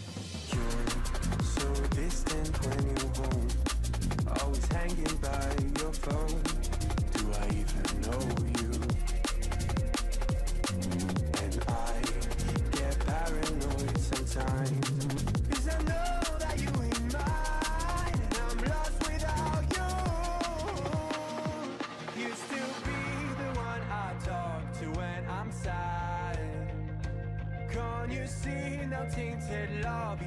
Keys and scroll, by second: 5.3 ctrl+t, 9.7 ctrl+=, 11.0 ctrl+t, 12.9 ctrl+=, 18.3 ctrl+z, 26.8 ctrl+0, 29.2 ctrl+t.